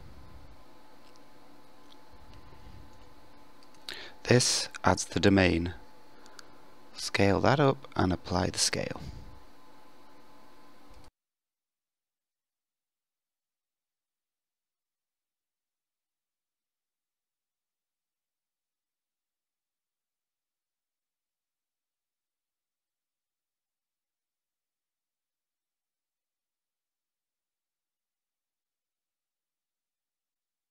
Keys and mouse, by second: 8.2 KP_1, 9.3 s, 14.8-15.7 middle drag, 22.2-24.3 drag, 26.4 ctrl+a.